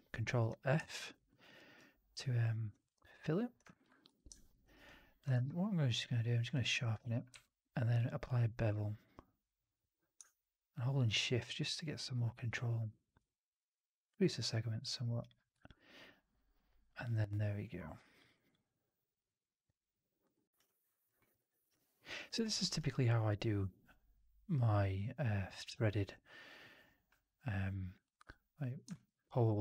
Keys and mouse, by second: 0.7 alt+click, 1.2 alt+middle click, 1.5 alt+right click, 2.0 alt+click, 3.6 alt+right click, 4.0 4, 4.5 right drag, 4.7-5.1 drag, 5.2 q, 7.2 q, 15.5-18.1 alt+drag, 18.2 alt+right drag, 18.4-20.1 alt+drag, 20.2 alt+right drag, 20.4 alt+right drag, 20.5-20.9 alt+drag, 21.0 alt+middle drag, 21.3 alt+right drag, 21.5 alt+right drag, 21.6-22.0 alt+drag, 22.1 alt+middle drag, 22.3 alt+right drag, 22.5 alt+right drag, 22.8-28.0 alt+drag, 28.8 alt+middle drag, 29.5-29.6 alt+middle drag.